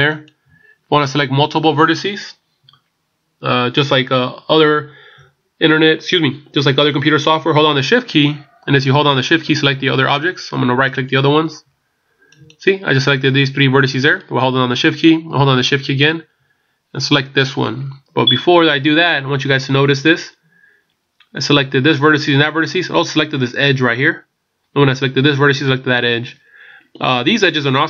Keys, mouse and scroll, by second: 11.0 shift+right click.